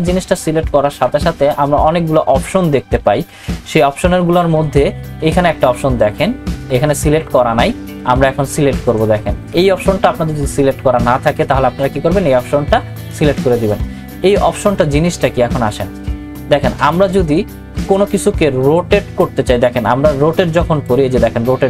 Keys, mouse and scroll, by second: 0.1 click, 0.8 ctrl+t, 13.0 click, 19.8-21.6 drag.